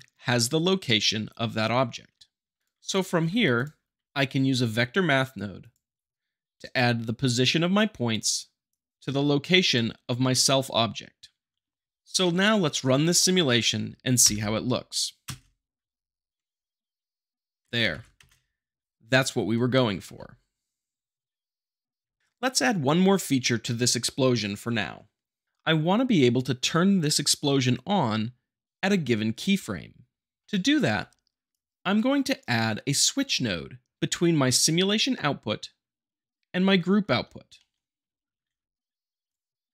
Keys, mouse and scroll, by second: 2.6 click, 2.6 middle click, 3.2 g, 3.5 click, 4.0 q, 4.5-5.6 drag, 11.7 shift+middle click, 14.2 shift+Left, 15.2 space, 17.6 space, 17.9 shift+Left, 18.2 space, 20.0 shift+Left, 22.0 Left, 30.4 shift+middle click, 31.5-32.5 drag, 37.0-38.4 middle drag, 38.4 shift+a, 39.3 click.